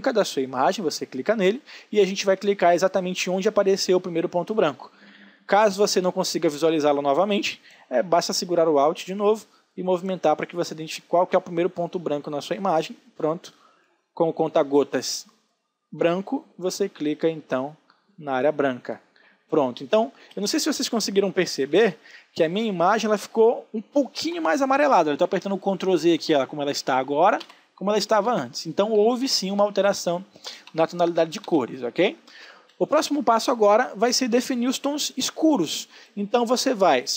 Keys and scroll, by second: 2.0 ctrl+space, 21.2 ctrl+z.